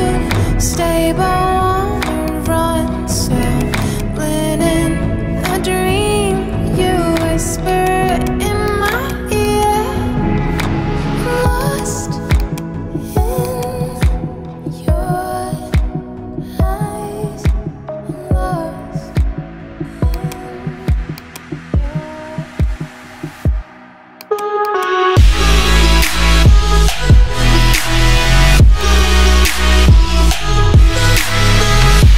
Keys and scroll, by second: 0.8 alt+BackSpace.